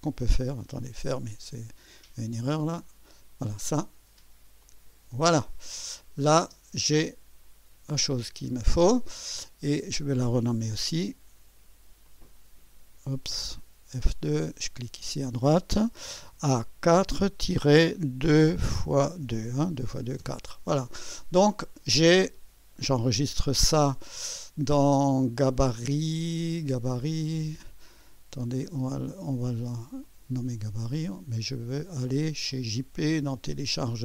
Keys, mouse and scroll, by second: 0.8 click, 3.0 click, 4.6 click, 6.0 click, 6.5 space, 7.0-9.3 drag, 9.8 click, 11.0 F2, 12.1 click, 13.7 F2, 14.1 click, 16.4 shift+a, 17.0 4, 18.3 KP_2, 18.9 x, 19.2 KP_2, 20.2 Return, 23.3 ctrl+s, 30.0 click, 32.5 click, 33.5 click.